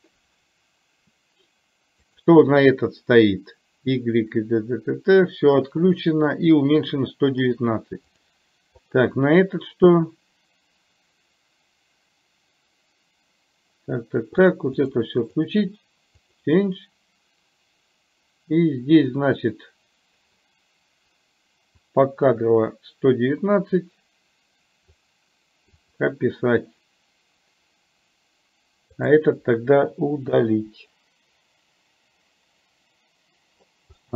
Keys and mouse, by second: 2.2 click, 8.2 click, 8.9 click, 14.9 drag, 16.4 click, 21.9-25.0 drag, 25.9 click, 29.0 click, 34.0-34.1 middle drag.